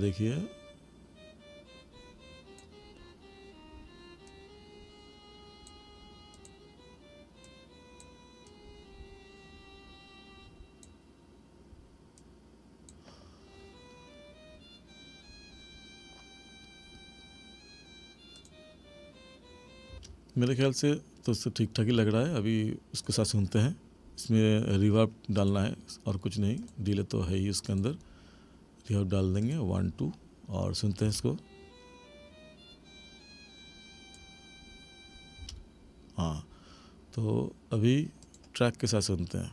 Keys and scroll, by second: 19.9 space, 31.0 space, 35.5 space.